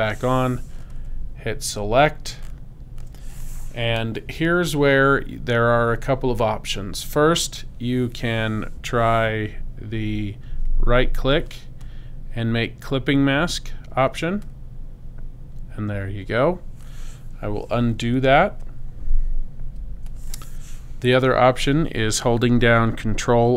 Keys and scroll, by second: 19.6 super+z.